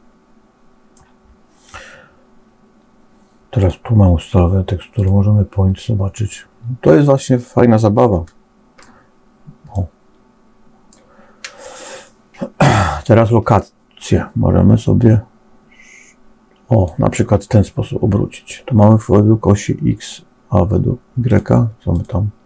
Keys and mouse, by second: 3.5-5.0 drag, 6.9-9.0 middle drag, 9.6-10.9 middle drag, 14.0-16.8 drag, 21.2 click.